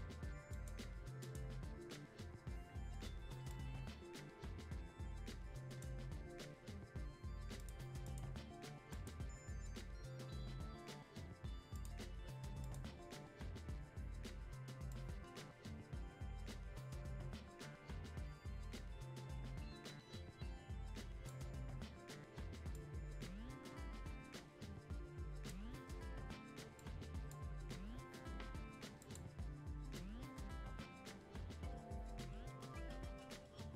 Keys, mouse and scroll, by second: 3.5-7.6 drag, 11.7 click, 14.9-33.7 drag.